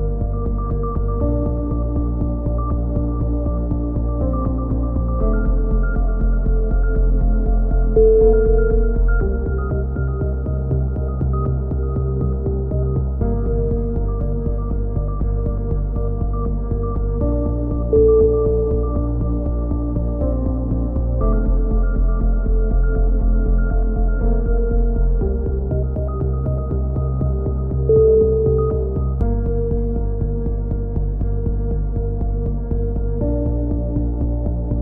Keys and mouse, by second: 1.2 click, 2.0 middle click, 2.6-4.5 drag, 4.7 a, 5.5-6.8 right drag, 6.7 f, 7.0 w, 8.3 a, 9.1-12.2 middle drag, 12.4-14.0 right drag, 13.7 e, 14.4-15.4 drag, 17.5 a, 19.9 n, 20.2 shift+space, 22.0-23.3 right drag, 22.4 click, 23.7 middle click, 25.1 right click, 26.0 f, 26.2 right click, 26.7 middle click, 26.9 click, 26.9 right click, 27.9 right click, 28.4 a, 28.6-29.6 drag, 30.5-32.1 middle drag, 33.0 click, 33.4-34.4 drag.